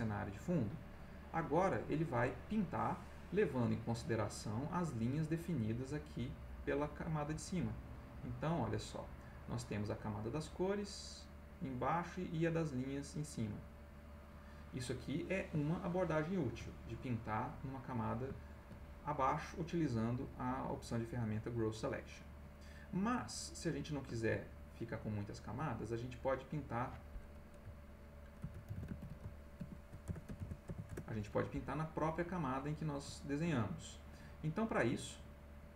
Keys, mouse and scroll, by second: 0.2 click, 1.4 click, 7.9 click, 9.1 click, 9.5 click, 11.1 click, 13.0 click, 13.5 click, 13.9 click, 14.3 click, 15.1 middle click, 16.1 ctrl+middle click, 16.6 ctrl+middle click, 17.9 middle click, 18.4 ctrl+middle click, 19.3 middle click, 20.3 click, 22.0 click, 22.5 middle click, 23.7 ctrl+z, 25.5 click, 26.4 click, 28.1-31.1 typing, 32.1-33.1 scroll up 1, 33.1-34.0 ctrl+scroll up 1.